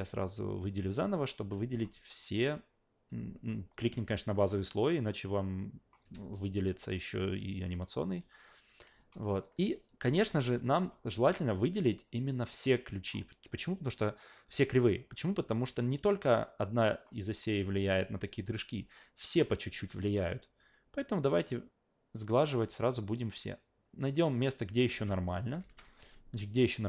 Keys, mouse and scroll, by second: 0.5 click, 2.5 click, 4.7 click, 6.0 a, 7.7 click, 9.0-9.4 alt+right drag, 9.7 click, 10.0 f, 10.8 click, 11.8-13.1 drag, 15.7 click, 17.0 click, 20.1-24.8 drag, 24.9 alt+v, 25.6 alt+v, 26.1-26.8 drag.